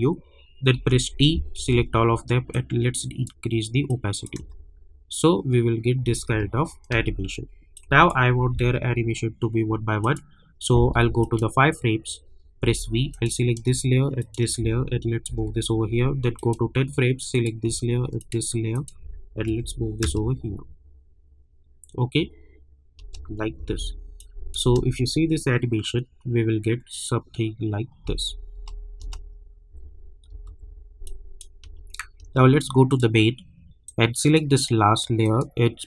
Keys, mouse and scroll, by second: 0.0-1.2 typing, 1.7 ctrl+a, 2.5-4.4 drag, 4.4 space, 7.7 click, 8.5 =, 8.7 =, 10.0 click, 12.6 v, 13.1 click, 14.2 shift+click, 15.2 [, 16.3 click, 18.2 ctrl+click, 19.5 [, 20.0 space, 22.9 space, 24.2 click, 24.6 space, 28.0 space, 30.3 -, 30.4 -, 31.0 click, 31.6 space, 32.9-35.2 drag.